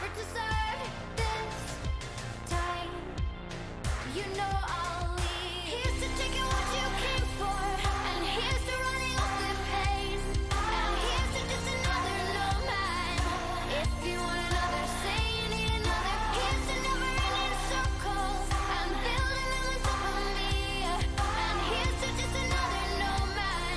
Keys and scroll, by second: 1.3-4.6 typing, 11.5-13.3 typing, 23.3-23.7 typing.